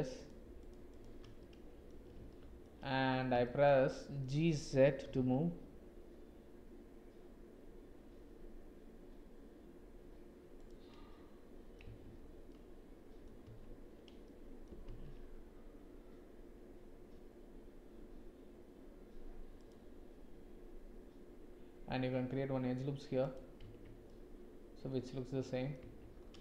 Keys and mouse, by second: 0.9 shift+click, 1.4 middle click, 2.3 shift+click, 3.4 shift+middle click, 3.8 click, 5.0 g, 11.1 click, 11.9 Tab, 12.4 middle click, 13.4 Tab, 14.2 middle click, 14.8 ctrl+r, 23.7 Tab, 24.0 click, 24.4-25.7 middle drag, 25.7 Tab.